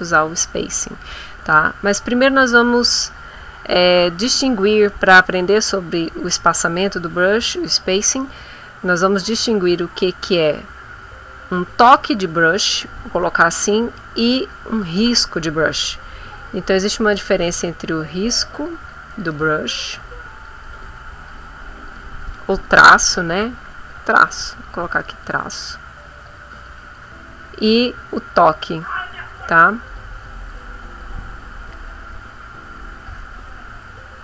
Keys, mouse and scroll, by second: 0.3 click, 16.6 click, 17.1-19.3 drag, 19.6-23.5 drag, 23.8-27.1 drag, 28.2-30.6 drag, 30.8 click, 31.8-34.2 drag.